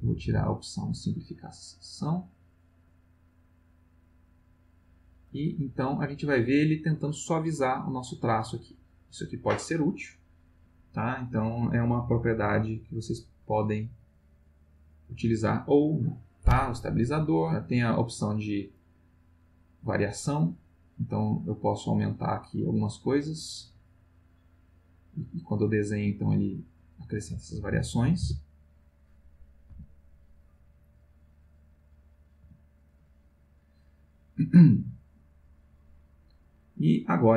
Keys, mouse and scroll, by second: 4.0 click, 5.3 click, 7.4 click, 8.4 click, 9.6 click, 12.3 click, 13.9 click, 17.7 click, 18.8 click, 20.6 click, 21.3-21.8 drag, 21.9-22.4 drag, 22.6-23.2 drag, 23.6 click, 24.9 click, 28.2 Delete, 29.7 x, 30.0 click, 31.8 click, 32.4 x, 32.9 click, 34.8 click, 35.0 scroll up 1, 35.5 click, 36.0 scroll up 1, 36.0 click.